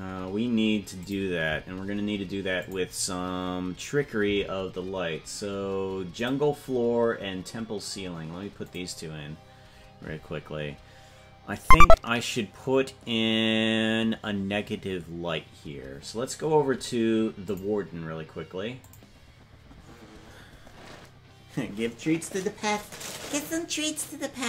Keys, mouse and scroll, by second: 1.2 click, 2.6 click, 8.2 click, 9.2 click, 17.4 click, 19.2 click.